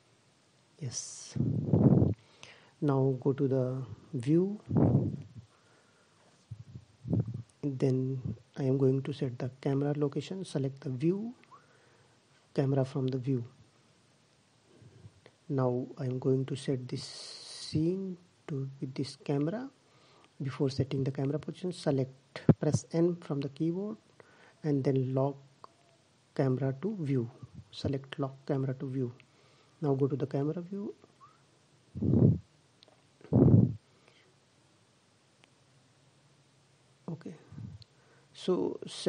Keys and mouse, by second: 1.2-3.7 middle drag, 8.5-9.0 drag, 14.7-16.5 middle drag, 16.7-18.4 middle drag, 20.6 n, 23.7 middle click, 23.7-26.4 drag, 26.6-28.4 drag, 30.0-30.8 drag, 32.4-33.2 drag, 33.2 middle click, 34.0 click, 34.3 middle click, 34.8-36.5 drag, 37.1 n, 38.9-39.0 drag.